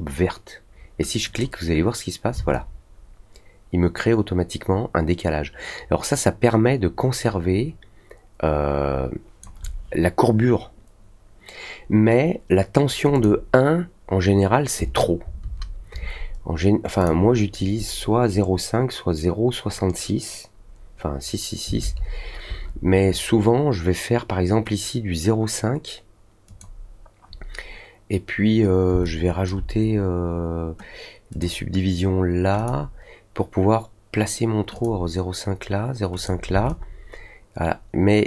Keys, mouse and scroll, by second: 1.2 click, 2.5-9.4 alt+drag, 13.1 click, 16.9 click, 26.4 click, 29.0-29.4 alt+drag, 31.3 click, 32.5 click, 34.7 click, 36.1 click, 36.6-38.2 alt+drag.